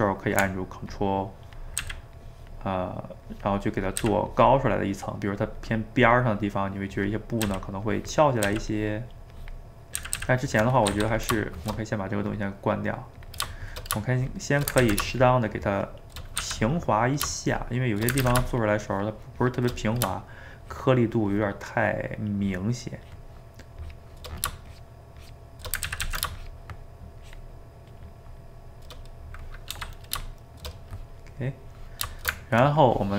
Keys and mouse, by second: 0.9 ctrl+click, 1.8 ctrl+z, 2.2-4.0 ctrl+drag, 4.0 ctrl+z, 4.3-7.4 ctrl+drag, 7.4 ctrl+z, 7.9 ctrl+click, 8.5 ctrl+z, 8.7-10.0 ctrl+drag, 10.0 ctrl+z, 10.2 ctrl+z, 10.9 f, 11.4 shift+middle click, 12.3-13.5 drag, 13.5 shift+middle click, 14.2 shift+click, 14.8 ctrl+z, 15.2-16.4 shift+drag, 16.4 f, 17.0 middle click, 17.5 shift+click, 18.2 ctrl+z, 18.5-19.9 shift+drag, 19.9 shift+middle click, 20.7-25.9 shift+drag, 25.9 ctrl+z, 26.1 ctrl+z, 26.4-28.5 shift+drag, 28.5-29.7 shift+middle drag, 29.7 f, 30.5-33.1 shift+middle drag.